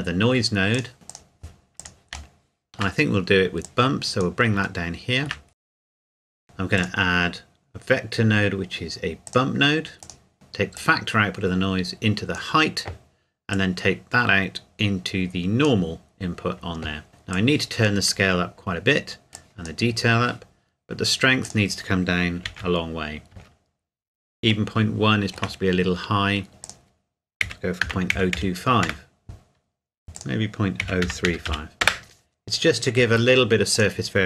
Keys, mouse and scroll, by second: 0.7 click, 1.1 click, 2.3 shift+middle click, 2.8 shift+scroll down 2, 3.6 click, 4.8 shift+middle click, 5.5 scroll up 1, 5.6 click, 6.8 click, 9.3 click, 10.3-10.7 scroll up 1, 10.7 click, 17.3 click, 20.8-21.4 scroll up 1, 21.4 click, 22.4 KP_Decimal, 23.3 KP_Enter, 24.7 shift+middle click, 25.7-26.1 scroll up 1, 26.6 click, 27.4 KP_Decimal, 27.8 KP_0, 28.1 KP_2, 28.3 KP_5, 28.8 KP_Enter, 30.1 click, 30.8 KP_Decimal, 31.0 KP_0, 31.3 KP_3, 31.5 KP_5, 31.8 KP_Enter, 33.7 click.